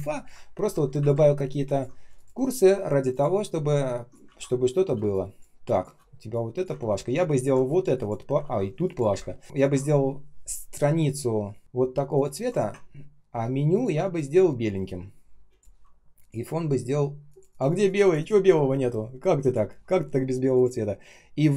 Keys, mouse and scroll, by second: 0.5 shift+Up, 2.1 shift+click, 2.3 shift+click, 4.2 ctrl+z, 4.9 space, 5.4 space, 6.7 ctrl+z, 6.9-7.3 ctrl+scroll down 1, 7.3 ctrl+click, 8.3 ctrl+z, 9.0 Delete, 9.4 ctrl+click, 13.6 ctrl+click.